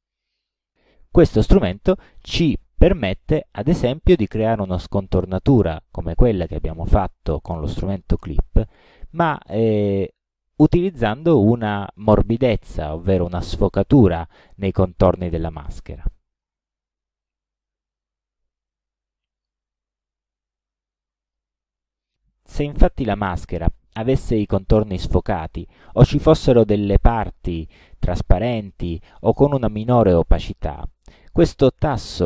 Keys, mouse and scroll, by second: 16.3 click, 17.3-19.7 drag, 21.3 click, 26.4-28.6 drag.